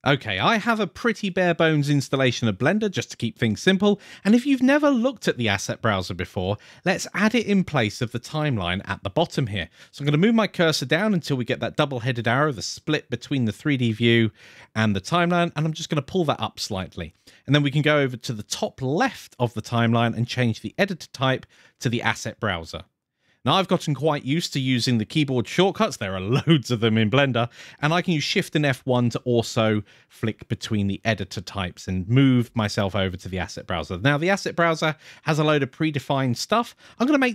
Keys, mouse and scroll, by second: 13.9-16.5 drag, 19.5-20.5 drag, 28.1 shift+F1, 28.5 shift+F1.